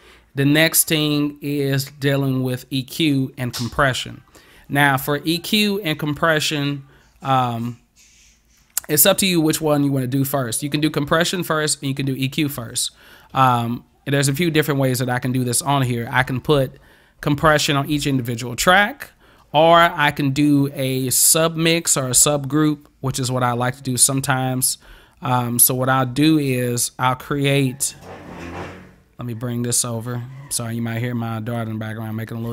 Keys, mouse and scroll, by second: 30.1-31.6 drag.